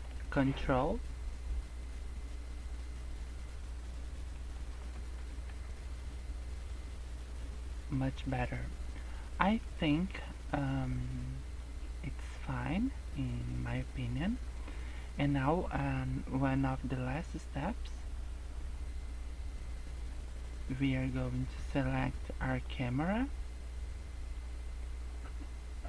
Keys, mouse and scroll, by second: 5.1 scroll up 3, 5.6 Tab, 6.2 scroll up 1, 7.8-8.2 scroll down 8, 13.0-13.5 scroll down 4, 19.5 scroll up 1, 22.5 click.